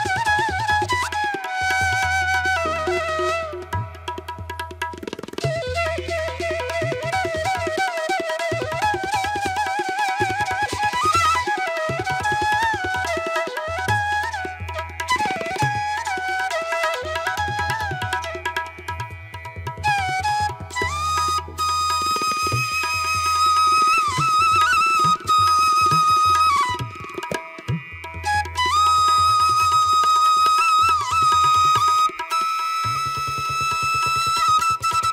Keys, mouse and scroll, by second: 4.7 ctrl+alt+z, 5.8 ctrl+alt+z, 7.5 ctrl+alt+z, 8.7 ctrl+alt+z, 20.6 ctrl+-, 20.8 ], 22.2 ctrl+-, 24.4 ctrl+-, 27.2 ctrl+alt+z, 28.7 ctrl+alt+z, 31.3 space, 31.7 space, 34.1 ctrl+-.